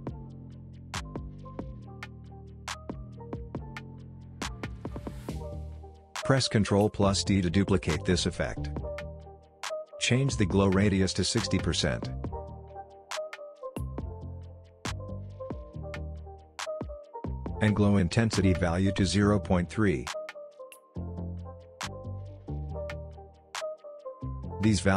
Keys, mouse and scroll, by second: 1.1 ctrl+z, 2.4-5.2 drag, 5.1 ctrl+z, 6.3 click, 8.3 ctrl+d, 10.2-12.1 drag, 15.5 ctrl+z, 16.1 click, 16.5 ctrl+z, 17.5-21.6 drag, 23.0-23.6 scroll down 1, 23.6-24.9 scroll up 1.